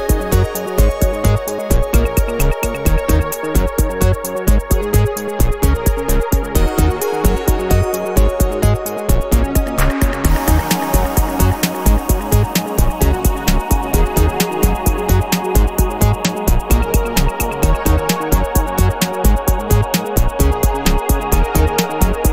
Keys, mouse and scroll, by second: 1.4 ctrl+click, 2.1 ctrl+click, 2.9 ctrl+click, 3.5-4.7 ctrl+middle drag, 4.7 click, 5.5 click, 5.9 middle click, 8.1 ctrl+click, 8.7 ctrl+click, 9.4 ctrl+click, 10.0 ctrl+right click, 11.0 click, 11.6 click, 13.4 ctrl+click, 13.8 ctrl+click, 14.4 ctrl+click, 14.9 ctrl+right click, 16.6 click, 17.3 click, 18.2-20.4 middle drag, 20.7 ctrl+click, 21.2 ctrl+click, 21.7 ctrl+click, 22.2 ctrl+right click.